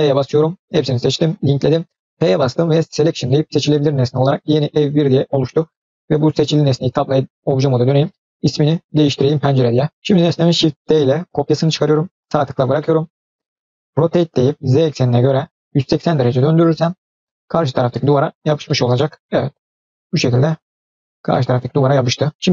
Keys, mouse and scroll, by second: 2.0 p, 4.2 click, 6.7 Tab, 7.7 click, 8.3 click, 10.9 shift+d, 12.6-13.6 middle drag, 14.2 r, 17.5 scroll down 1, 17.8-18.3 middle drag, 18.4 scroll up 1, 18.5-20.5 middle drag, 20.8-22.1 scroll up 2, 21.2-22.1 middle drag, 22.2 scroll down 1.